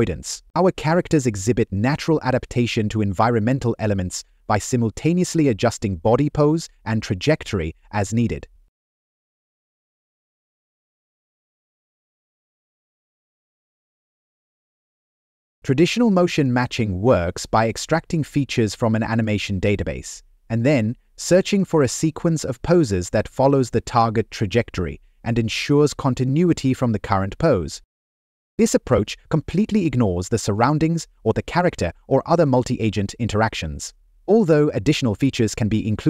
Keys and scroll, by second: 0.8 Left, 7.9 Down, 8.4 Right, 12.5 Left, 12.9 Down, 13.0 Right, 15.9 Left, 15.9 Down, 16.8 Right, 17.7 Up, 18.3 Left, 19.1 Right, 20.6 Left, 20.7 Up, 22.5 Left, 23.1 Right, 24.9 Down, 25.1 Left, 27.2 Up, 28.1 Right, 30.1 Left, 31.3 Up, 32.9 Right, 33.9 Right, 34.6 Down, 34.8 Left, 35.9 Left.